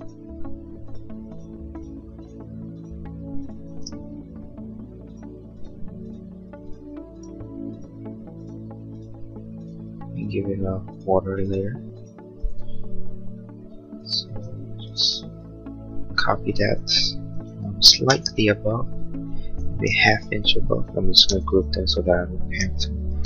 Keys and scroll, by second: 17.4 1, 17.7 /, 21.2 g.